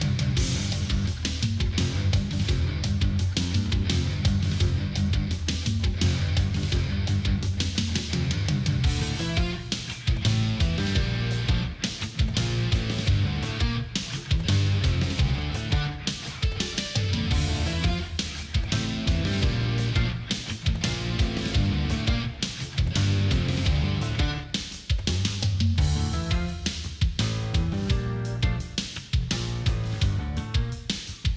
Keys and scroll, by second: 0.1 ctrl+=, 3.9 ctrl+z, 10.3 ctrl+=, 10.7 ctrl+-, 10.8 space, 14.8 Left, 15.1 Down, 15.7 Down, 15.9 Right, 22.6 space, 25.5 space.